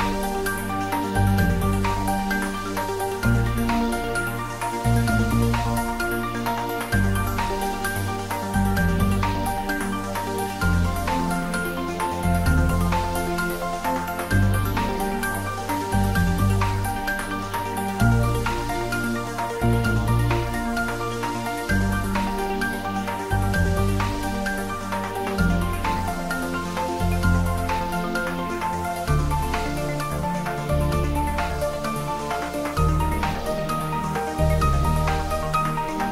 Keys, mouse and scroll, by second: 3.2 click, 3.4 ctrl+s, 4.5 ctrl+s, 5.2-7.0 middle drag, 7.0 ctrl+s, 7.3 ctrl+middle click, 7.7 shift+middle click, 8.5-9.7 ctrl+middle drag, 9.7 ctrl+s, 10.1 click, 10.8 middle click, 11.6 ctrl+middle click, 12.0-17.0 shift+middle drag, 17.0-18.2 shift+middle drag, 18.2 click, 18.7 shift+middle click, 19.8 shift+right click, 20.3 shift+a, 21.9 click, 22.7 s, 24.7 click, 26.2-27.1 typing, 27.2-28.5 ctrl+middle drag, 28.3-29.9 typing, 29.6 click, 30.5 click, 30.9-34.6 typing, 31.4 click, 32.3 click, 33.0 click, 34.2 click, 35.3 middle click.